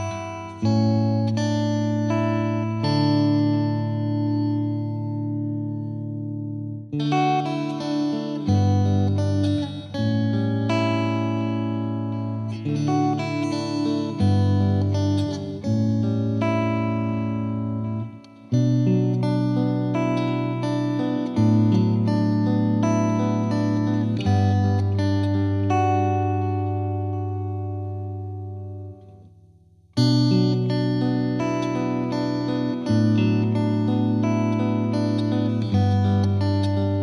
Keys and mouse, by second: 1.9 click, 2.1 click, 2.6 click, 2.9 super+click, 3.2 click, 4.3 click, 5.6 click, 6.3 click, 7.8 click, 9.7 click, 10.1 click, 10.4 click, 10.6 alt+click, 11.1 click, 12.3 click, 13.0 click, 13.5 click, 13.9 click, 14.5 click, 14.8 click, 15.3 click, 16.4 click, 16.5 click, 17.3 click, 21.2 click, 22.2 click, 23.2 right click, 23.7 click, 24.2 click, 24.7 click, 25.5 click, 26.0 click, 26.5 click, 28.1 click, 28.5-29.6 drag, 30.2 click, 31.0 click, 31.5 click, 32.5 click, 33.0 click, 33.6 click, 34.2 click, 34.8 click, 35.2 click, 36.8 click.